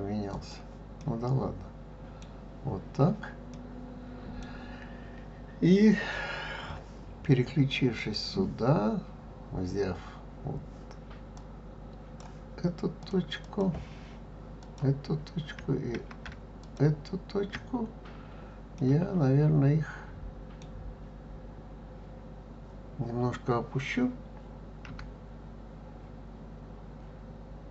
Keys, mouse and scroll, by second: 1.0-6.5 middle drag, 7.9 click, 11.3-13.1 drag, 13.4 click, 14.6 click, 16.6 shift+click, 18.7-21.8 middle drag, 24.8 g.